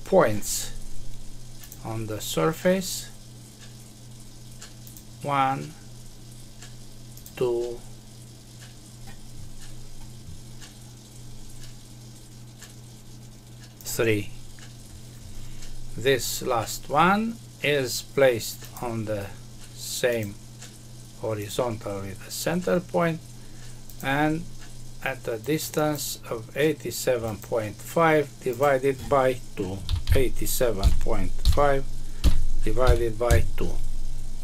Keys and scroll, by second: 33.2 Return.